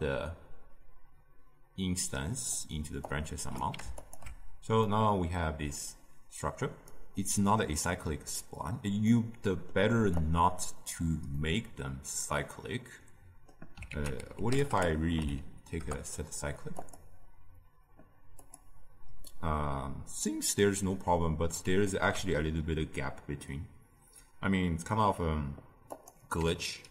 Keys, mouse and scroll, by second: 2.5 click, 3.9 alt+shift+click, 4.9-6.9 middle drag, 6.9-11.4 right drag, 11.4-15.8 middle drag, 15.8 ctrl+a, 18.4-19.2 drag, 19.2-26.9 middle drag.